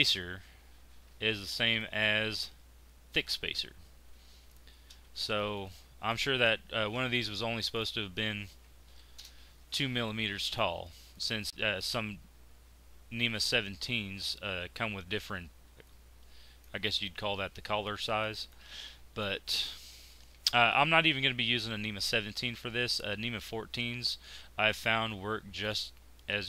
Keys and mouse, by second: 20.1-21.8 middle drag, 23.6 z, 24.9 Tab, 25.1 Tab, 25.8 Tab, 26.0 Tab.